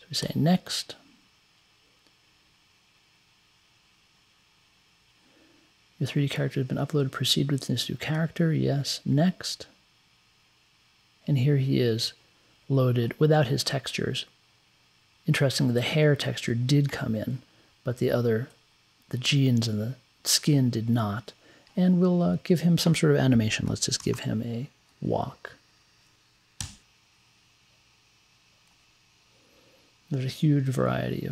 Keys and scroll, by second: 23.6-24.7 typing, 26.7 Return.